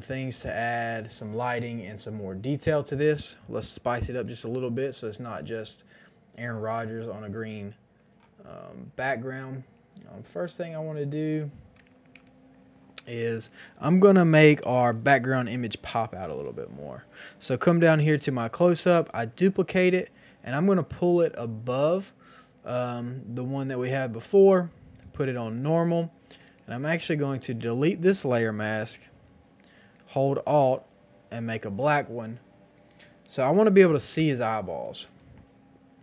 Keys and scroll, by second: 11.8 KP_1, 11.8 KP_0, 12.0 KP_0, 12.1 Return, 15.6 ctrl+j, 33.9 KP_2, 33.9 KP_5, 34.0 KP_0, 34.0 Return, 34.5 space.